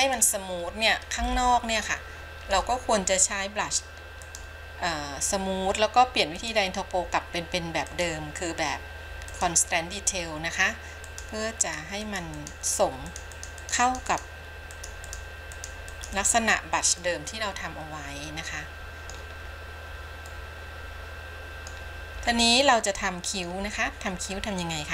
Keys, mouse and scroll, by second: 0.2 click, 1.4-2.8 shift+middle drag, 4.4 click, 6.5-10.4 drag, 11.3 click, 11.8 click, 12.3 click, 12.6 click, 13.3 click, 13.6 click, 13.9 click, 14.1 click, 14.4 click, 15.0 click, 15.4 click, 15.8 click, 16.2 click, 17.2-19.4 middle drag, 19.6-20.6 scroll down 3, 20.6-21.9 middle drag, 22.4-22.9 scroll up 2, 23.0 middle click, 24.5 scroll down 2.